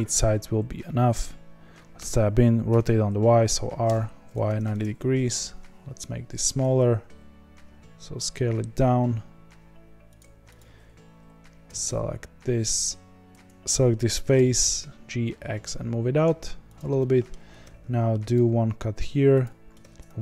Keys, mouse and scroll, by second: 1.9 Tab, 2.7 r, 5.2 s, 7.1 s, 10.5 click, 11.6 g, 14.3 g, 16.9 middle click, 17.6 ctrl+r, 19.7 ctrl+r.